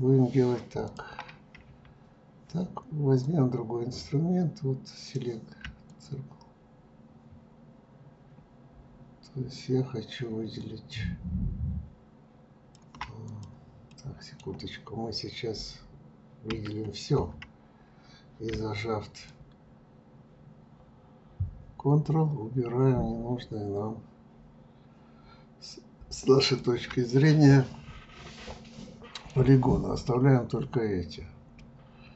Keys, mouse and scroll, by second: 0.8 click, 3.2-8.9 drag, 13.2 click, 13.9-16.5 middle drag, 16.5 a, 19.2-22.3 ctrl+drag, 27.2-30.2 middle drag, 31.5-32.1 middle drag.